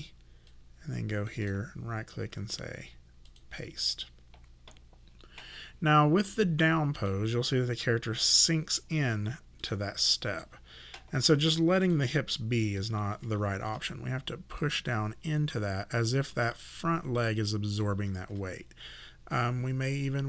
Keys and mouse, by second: 1.5 right click, 3.3 click, 6.4 click, 9.6 click, 11.8 click, 13.7 w, 14.9 click, 18.3 e, 19.3 click.